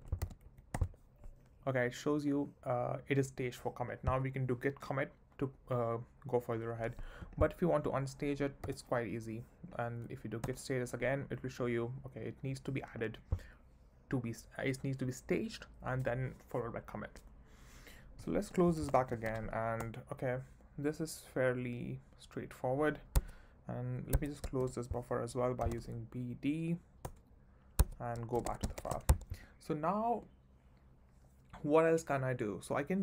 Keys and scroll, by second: 0.0-0.1 typing, 0.4 Right, 0.7 Return, 8.7 u, 10.1 Up, 10.4 Return, 18.6-19.7 typing, 19.8 Return, 23.1 Escape, 24.6 shift+;, 25.7 d, 26.7 d, 27.0 Return, 27.8 Escape, 28.3 shift+;, 28.8 shift+1, 29.0 shift+Return, 29.1 Escape.